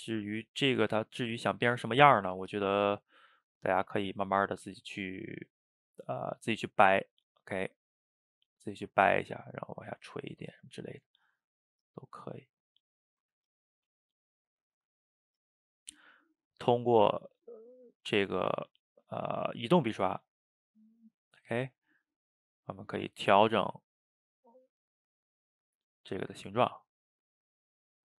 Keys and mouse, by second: 0.1 middle click, 0.7-1.8 drag, 1.8 ctrl+z, 2.0 ctrl+z, 2.3 f, 2.9-4.1 drag, 4.1 ctrl+z, 4.3 click, 5.2 middle click, 5.7 click, 6.6 middle click, 7.1 click, 7.8 middle click, 8.7-9.7 drag, 9.7 middle click, 9.9 ctrl+z, 10.1 ctrl+z, 10.3 click, 10.9 middle click, 11.3-12.7 drag, 12.7 middle click, 13.4 ctrl+z, 13.5-14.9 drag, 14.9 middle click, 15.5-17.5 drag, 17.5 middle click, 18.1 f, 18.6 click, 19.3 middle click, 19.7 click, 20.1 middle click, 20.5 click, 20.8 middle click, 21.5 click, 21.8 middle click, 22.4 click, 22.7 middle click, 23.3 click, 23.7 middle click, 24.2 click, 24.5 middle click, 24.9 click, 25.1 middle click, 25.5 click, 26.3-27.3 middle drag, 27.3 click, 27.6 middle click.